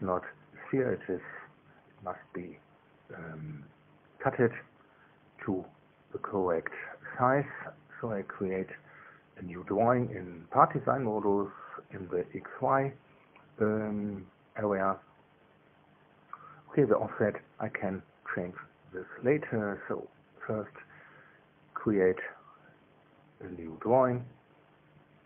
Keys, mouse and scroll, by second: 1.1 click, 4.0 click, 5.6 2, 7.9 click, 17.2-19.5 middle drag, 19.5 click, 22.0-24.7 middle drag, 24.7-25.2 drag.